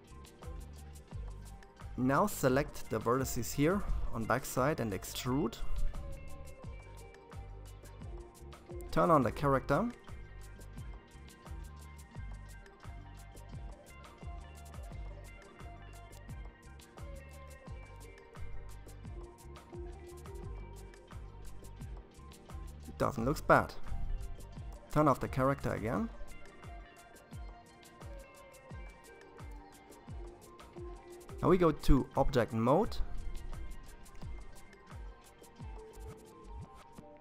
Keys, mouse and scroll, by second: 3.3 e, 8.1 click, 9.7-10.4 scroll down 3, 10.4-13.4 middle drag, 16.7 shift+z, 17.8-21.1 middle drag, 23.2 click, 24.3-25.8 middle drag, 25.8-26.6 scroll down 4, 26.6 middle click, 27.6-28.1 scroll up 3, 28.1-30.1 middle drag, 30.1-32.5 drag, 32.5-33.9 middle drag, 33.9-34.3 scroll up 2.